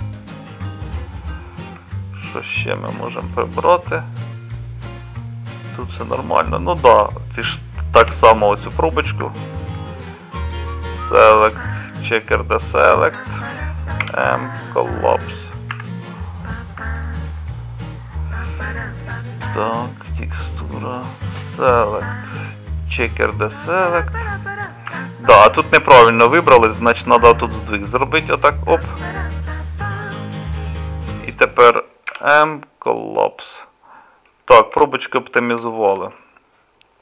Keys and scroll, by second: 8.0 2, 14.0 m, 15.7 z, 24.9 z, 32.1 m, 34.7 Tab.